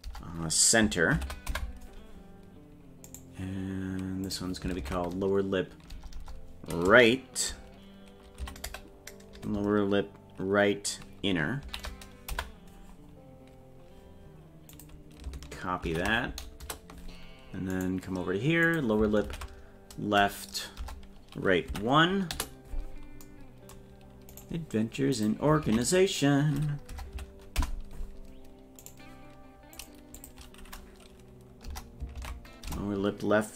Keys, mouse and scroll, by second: 3.1 right click, 4.3-12.8 drag, 6.2 BackSpace, 13.6-14.1 scroll down 3, 14.7-17.0 drag, 17.7 right click, 18.6-22.8 drag, 24.4 right click, 25.2-28.0 drag, 28.9 right click, 29.8 click, 30.1-33.5 drag.